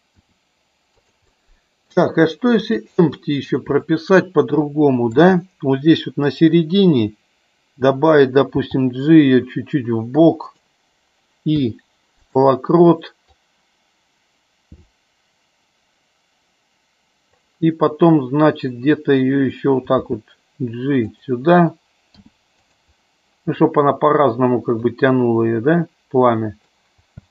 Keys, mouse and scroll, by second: 0.1 r, 1.2 middle click, 2.6 click, 3.8-5.1 middle drag, 8.5 g, 10.4 click, 11.6 i, 13.4-17.4 drag, 20.0 g, 22.0 i, 24.9-26.9 drag, 27.1 space.